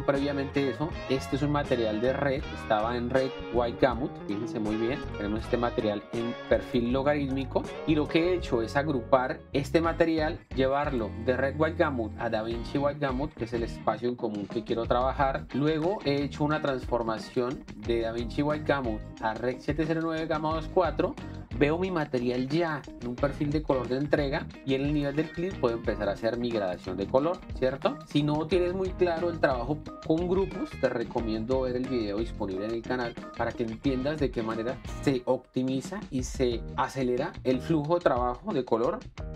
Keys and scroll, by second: 3.6 shift+d, 7.7 shift+d.